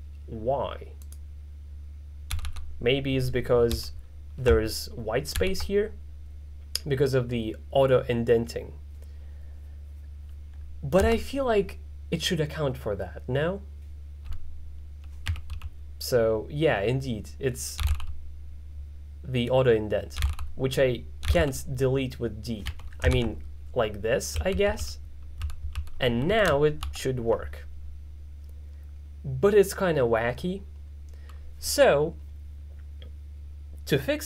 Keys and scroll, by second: 2.4 d, 2.5 d, 3.8 u, 5.4 shift+s, 15.1-16.1 typing, 17.6-18.4 typing, 20.0-23.2 typing, 24.4-26.9 typing.